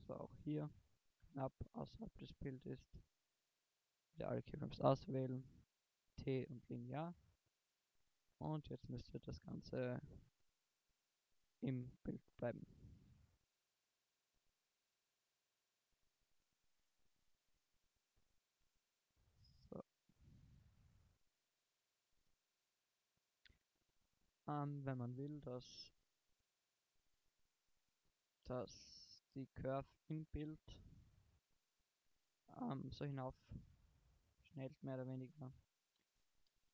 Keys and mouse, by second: 1.2 i, 3.0 a, 3.3 a, 4.3 t, 5.4 t, 7.2 shift+Left, 7.7 alt+a, 18.2 alt+a, 19.2 alt+a, 21.4 alt+a, 27.0 alt+a, 28.6 alt+a, 28.6 Right, 29.0 Right, 29.4 Right, 29.7 Right, 30.0 Right, 30.4 Right, 30.7 Right, 31.0 Right, 31.3 Right, 32.0 Right, 36.0 shift+Left.